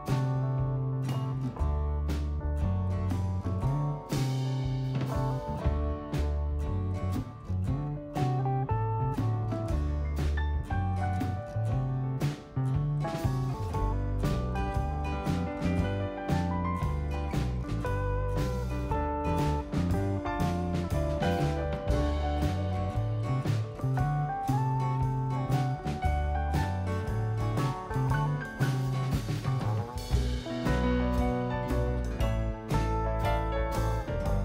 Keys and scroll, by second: 0.3 super+-, 10.1-12.2 typing, 13.0 super+=.